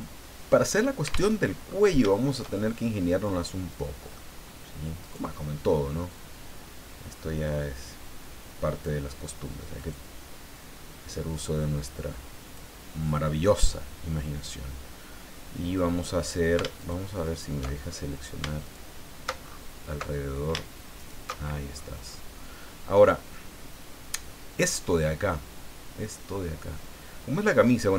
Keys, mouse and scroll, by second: 1.3 alt+Tab, 1.7-2.0 scroll up 3, 2.1 shift+middle click, 2.9 shift+scroll up 2, 5.0 right click, 6.1 click, 6.8-7.4 scroll down 2, 9.8 right click, 10.5-12.7 drag, 16.8 alt+shift+right click, 17.1 alt+shift+middle click, 17.2 alt+shift+right click, 17.8-18.4 alt+shift+scroll up 1, 18.6 alt+shift+right click, 19.4-20.2 alt+shift+scroll up 1, 20.2 scroll down 1, 21.0 alt+shift+right click, 21.4-22.0 alt+shift+scroll down 3, 22.7 scroll down 2, 23.1-27.9 middle drag.